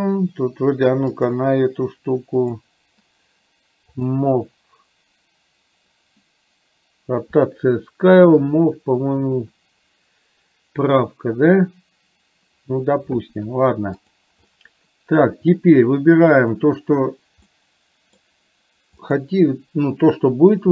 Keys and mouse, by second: 1.2 click, 2.6-12.6 drag, 14.1 click, 14.6-15.7 middle drag, 17.6 middle click, 19.1 click.